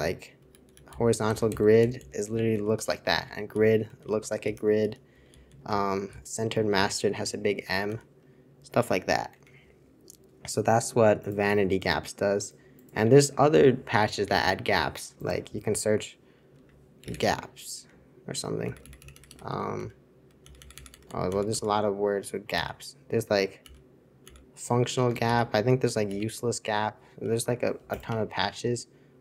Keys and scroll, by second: 0.0-7.9 typing, 9.1-9.8 typing, 16.7 /, 18.8-22.5 typing, 23.6-26.0 typing, 28.0 x.